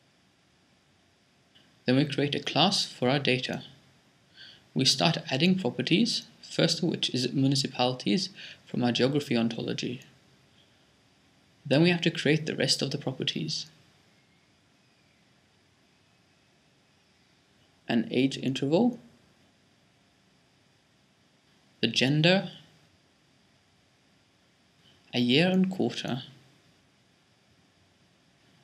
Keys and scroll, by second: 0.0-0.9 typing, 3.1-4.4 typing, 8.3-8.8 typing, 16.8-19.3 typing, 21.8-23.1 typing, 24.8-26.6 typing.